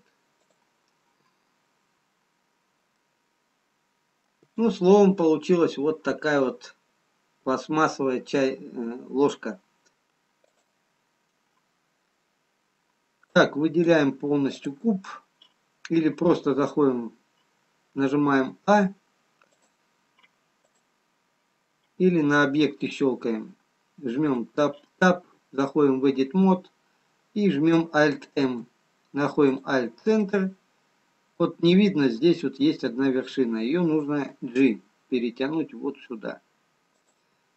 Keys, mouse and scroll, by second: 9.9 ctrl+z, 10.9 click, 13.8 click, 18.8 a, 19.9 click, 23.0 click, 24.6 Tab, 27.0-27.9 scroll up 1, 28.9 alt+m, 30.7 middle click, 33.3-34.4 scroll up 1, 34.7 g.